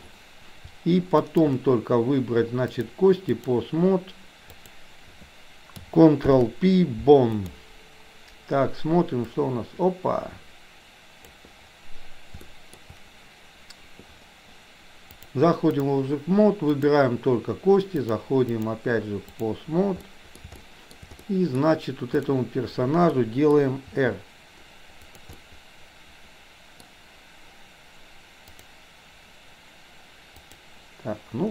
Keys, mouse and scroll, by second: 1.3 shift+click, 2.8-3.5 drag, 4.5 click, 7.5 ctrl+p, 9.3-11.4 drag, 12.5 shift+middle click, 15.3 click, 16.8 click, 18.1 click, 18.5-19.5 drag, 20.0-20.4 middle drag, 20.6-21.0 shift+middle drag, 21.3 middle click, 22.1 click, 23.1-23.6 middle drag, 23.9 r, 25.4-26.5 middle drag, 26.8 middle click, 28.5 click, 30.4 click.